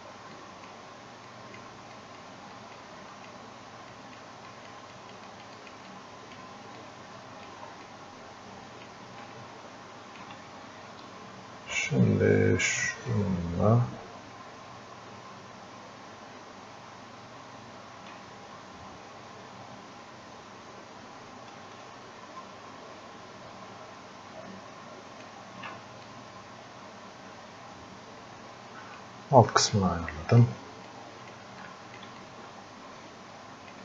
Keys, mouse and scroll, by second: 0.4-6.8 drag, 6.8 click, 7.9-9.3 drag, 9.3-13.1 alt+drag, 13.1-21.7 ctrl+shift+drag, 21.7 ctrl+shift+space, 25.3 ctrl+shift+space, 26.1-29.7 drag, 29.7 click, 30.9 click, 31.6 alt+click, 32.2-33.8 drag.